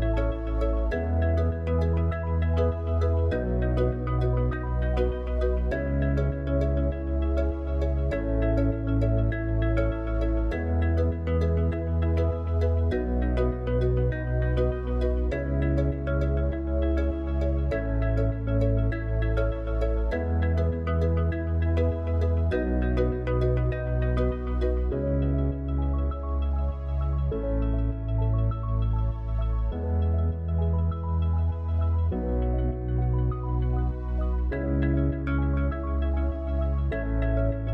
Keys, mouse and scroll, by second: 1.1-9.8 drag, 13.8 middle click, 15.0 middle click, 20.1 click, 21.6 ctrl+a, 23.1 click, 25.6 g, 28.4 KP_7, 31.9 g, 33.6-36.4 middle drag, 36.4 click.